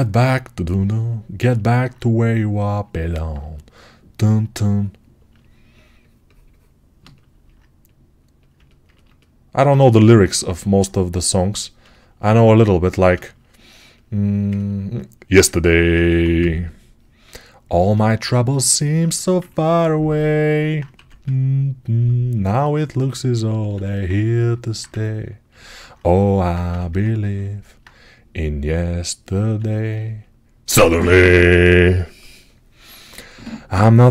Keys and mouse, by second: 5.2-7.2 shift+drag, 7.2-23.6 alt+right drag, 15.9 1, 20.8 1, 23.6-26.1 alt+drag, 26.5 3, 33.5-34.1 shift+right drag.